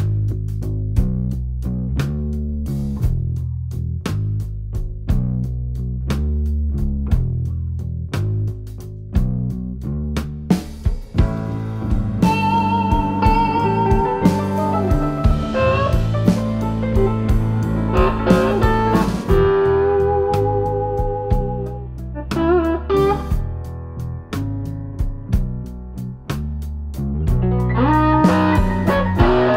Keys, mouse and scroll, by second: 3.7 3, 4.1 alt+click, 4.3 alt+click, 5.4 alt+e, 7.5 click, 8.1 click, 9.3 g, 11.9 w, 13.3 2, 14.3 alt+click, 15.1 g, 17.2 alt+click, 17.8 g, 19.3 middle click, 20.4 g, 22.4 alt+click, 23.0 g, 24.0 middle click, 26.2 3, 26.5 click, 28.2 click, 29.0 click.